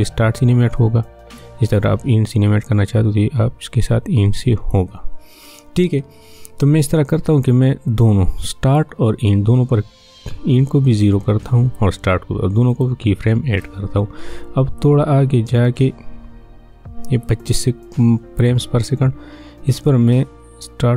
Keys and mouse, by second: 7.9-10.9 drag, 10.9-20.9 drag.